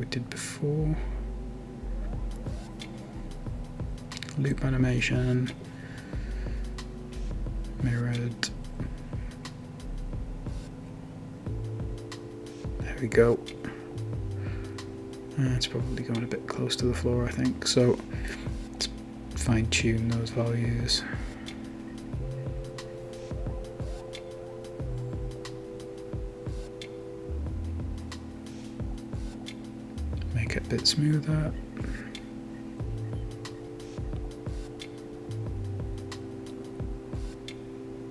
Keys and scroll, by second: 3.8-5.0 typing, 6.8-7.5 typing, 9.2 typing, 21.7-22.4 typing, 24.0-24.9 typing.